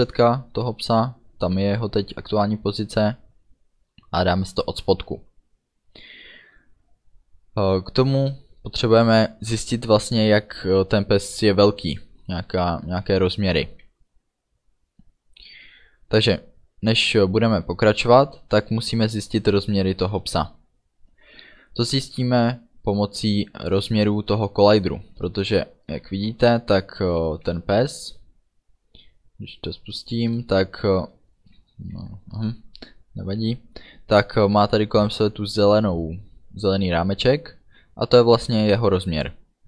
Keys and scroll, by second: 8.2 Return.